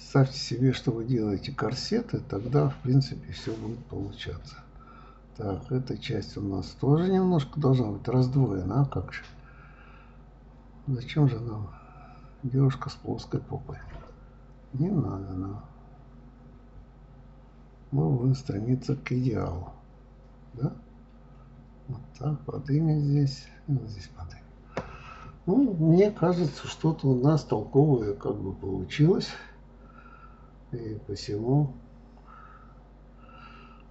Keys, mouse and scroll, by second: 0.2 middle click, 1.1 g, 2.0-3.4 middle drag, 3.4 click, 3.7 f, 4.2 click, 4.7 right click, 5.9 g, 8.6-10.2 middle drag, 11.9 click, 12.5-14.0 middle drag, 14.4 g, 16.5 click, 17.3 g, 19.0 click, 19.9 g, 21.7 click, 22.4 g, 23.4 click, 23.6-25.1 middle drag, 25.7-26.0 scroll up 1, 26.0-27.5 shift+middle drag, 27.5 scroll down 1, 27.7-29.3 middle drag, 33.1 click.